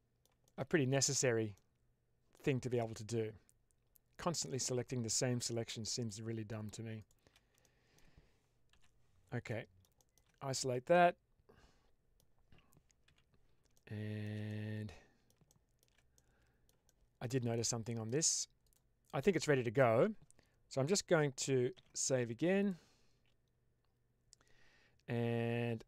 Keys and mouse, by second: 0.3 shift+middle click, 1.5 middle click, 2.9-5.6 middle drag, 6.9 shift+click, 7.6 shift+middle drag, 9.4-9.7 middle drag, 10.3 click, 10.8-12.1 middle drag, 12.9 n, 14.4-15.1 middle drag, 15.4 shift+middle drag, 16.0-16.5 middle drag, 16.8-17.1 shift+middle drag, 17.4-17.9 middle drag, 18.5 click, 21.6 ctrl+s.